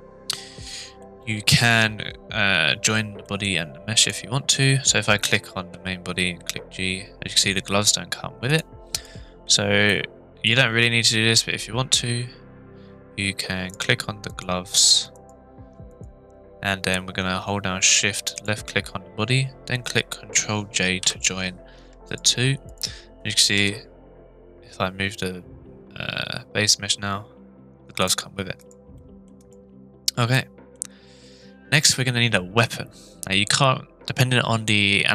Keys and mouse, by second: 1.0-1.5 shift+middle drag, 3.3 middle click, 4.0 click, 5.6 g, 8.5 right click, 8.9 click, 9.8-10.4 middle drag, 14.3 click, 15.9 click, 18.3 shift+click, 21.0 ctrl+j, 23.5 g, 28.6 click, 29.0-29.3 middle drag, 29.4 click, 30.3 middle click.